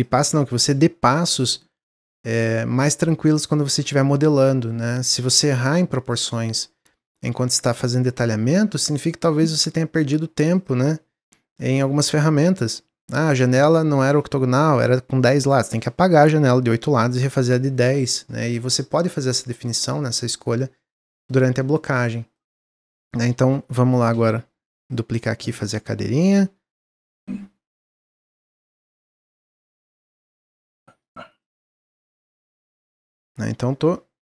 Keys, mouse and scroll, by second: 0.0 click, 2.0-3.5 drag, 5.1-6.0 middle drag, 6.0 click, 7.3 click, 10.5-12.0 drag, 18.0 click, 18.4-21.4 middle drag, 21.7 middle click, 22.4 scroll down 1, 22.6-23.1 middle drag, 23.1 click, 24.0 shift+d, 26.1-27.2 drag, 28.2-29.4 middle drag, 29.4 click, 30.2-31.4 middle drag, 31.4-32.3 drag.